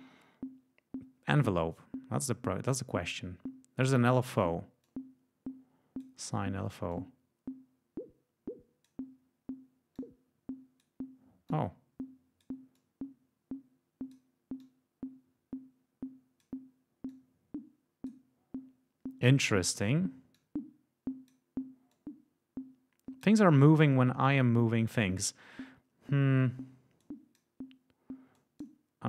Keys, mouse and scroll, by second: 4.8-6.1 drag, 6.8-9.0 drag, 9.9-10.9 drag, 11.4-12.5 drag, 12.7-14.3 drag, 14.5-16.5 drag, 17.0 click, 20.3-21.4 drag, 21.8-23.4 drag, 24.2 click, 26.9 click, 28.3 click.